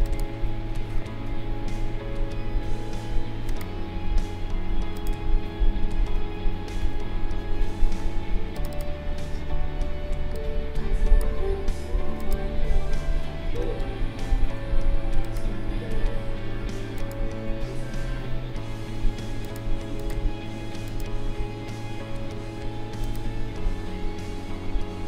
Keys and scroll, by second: 6.8 k.